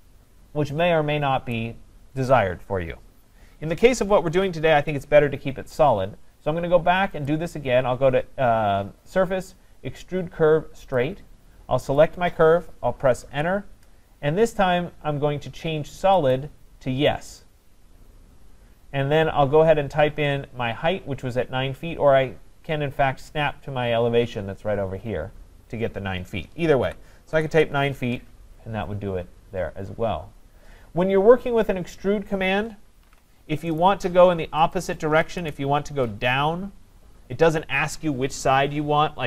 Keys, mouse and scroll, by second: 1.5 right click, 4.4 ctrl+z, 7.3 click, 11.0 click, 12.0 click, 13.3 Return, 16.3 click, 22.6 scroll, 26.9-27.3 typing, 27.5 Return, 33.1 ctrl+z, 33.8 right click, 34.7 click, 35.4 Return.